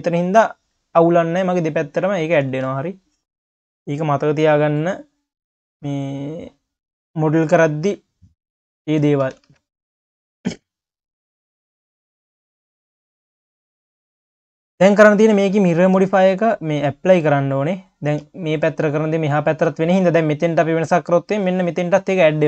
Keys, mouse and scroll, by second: 1.3-2.2 drag, 2.5 ctrl+s, 4.0 click, 4.5 click, 5.3 click, 5.9 click, 6.5-6.9 scroll up 3, 6.9 q, 7.5 click, 8.1 click, 8.9 scroll down 1, 9.0 q, 9.5 ctrl+s, 9.6 click, 9.9 scroll down 1, 10.1 q, 11.1 q, 11.7 ctrl+s, 11.9 q, 12.7 ctrl+s, 12.9 q, 14.8 click, 16.2-17.9 drag, 17.9 q, 18.8 click, 21.0 q.